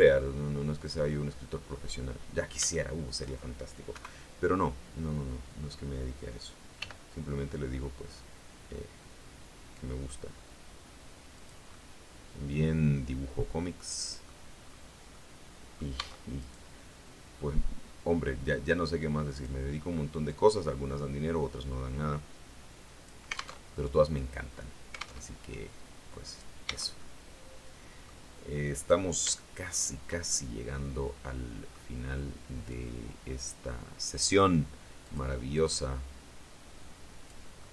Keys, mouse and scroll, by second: 2.6 shift+middle click, 3.8 KP_3, 6.7 g, 11.2 click, 11.6-14.3 middle drag, 14.3-15.0 scroll down 2, 15.0 middle click, 15.9 Tab, 16.3 right click, 18.5 click, 20.1-23.1 drag, 23.4 alt+Tab, 25.1 alt+Tab, 26.1 right click, 26.5 Tab, 26.9 click, 27.4 middle click, 28.7 right click, 29.6 shift+right click, 30.2-31.8 shift+middle drag, 32.6-34.4 drag, 34.9 click, 35.5-37.3 drag, 37.5-37.7 middle drag.